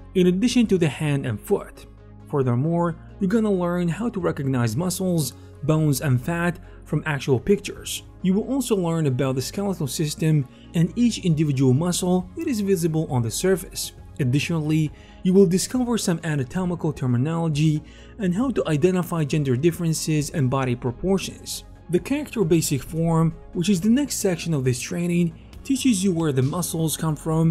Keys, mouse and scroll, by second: 21.9 alt+f, 21.9 middle click, 22.3 ctrl+shift+m, 22.5-25.4 drag, 23.4 alt+shift+m, 25.1 ctrl+alt+shift+c, 25.4 shift+middle click, 25.4 shift+f, 25.5 ctrl+shift+d, 25.6-27.5 drag, 26.6 ctrl+alt+KP_Decimal.